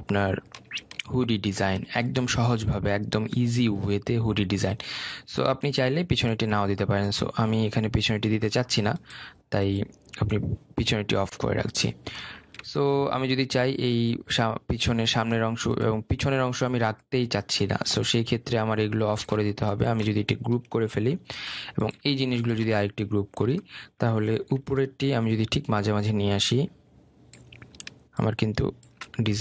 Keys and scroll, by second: 21.9 ctrl+g, 25.5 ctrl+t.